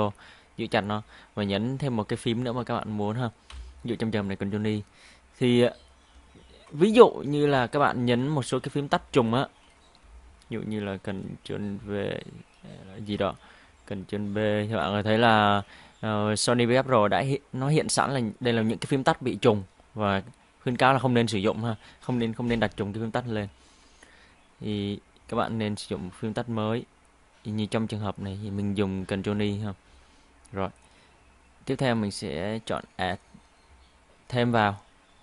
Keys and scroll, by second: 3.5 ctrl+i, 7.4 BackSpace, 8.3 ctrl+y, 8.9 ctrl+BackSpace, 9.2 ctrl+w, 10.0 BackSpace, 11.7 ctrl+v, 14.1 ctrl+b, 24.6 BackSpace, 29.4 ctrl+i.